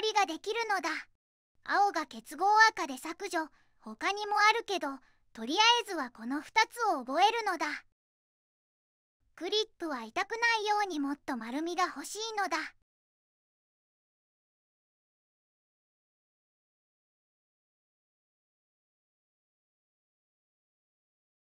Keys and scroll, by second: 2.4 2, 18.3 3.